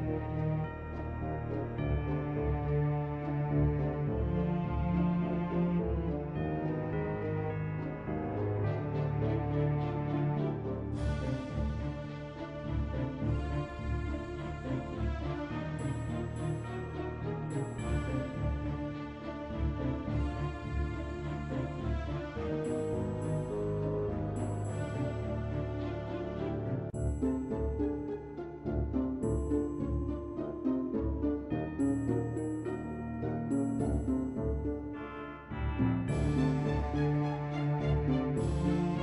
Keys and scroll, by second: 6.0 b, 24.8 ctrl+w.